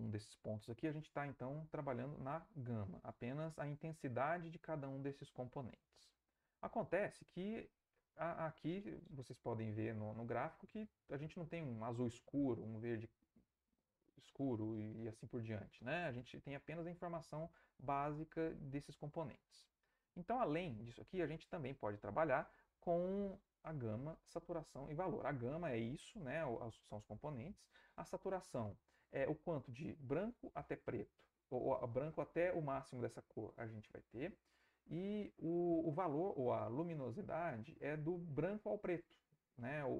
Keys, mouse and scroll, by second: 21.1 alt+Tab.